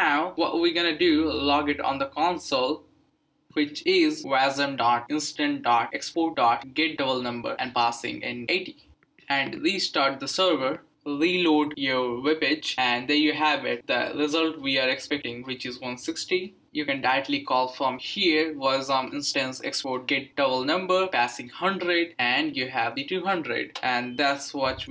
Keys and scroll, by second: 1.9-8.8 typing, 9.6 ctrl+c, 9.9 Up, 10.2 Return, 12.4 Return, 18.4-21.8 typing, 22.0 Return.